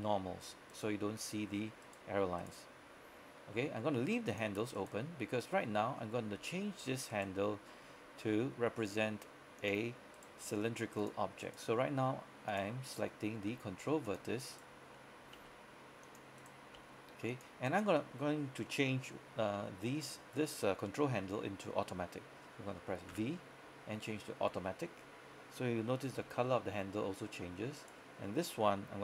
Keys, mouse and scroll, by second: 0.8 right click, 3.6 g, 4.3 click, 4.8 right click, 5.4-6.1 scroll down 1, 6.1 scroll up 1, 7.2 right click, 8.4 g, 9.7 click, 10.2 right click, 10.5 g, 11.1 click, 11.5 right click, 11.8 g, 12.6 click, 13.0 right click, 13.6-14.0 typing, 14.1 click, 14.6 right click, 15.4 typing, 16.1 click, 16.5 right click, 16.9 g, 17.4 click, 17.7 right click, 19.5 scroll up 1, 19.6 scroll down 1, 19.7 scroll up 1, 20.1 scroll down 1, 20.7-21.5 scroll up 1, 23.2 v, 24.1 click, 25.3 scroll up 1, 25.6 scroll down 1, 26.5 shift+middle click, 26.8-27.4 scroll up 1, 27.9 right click.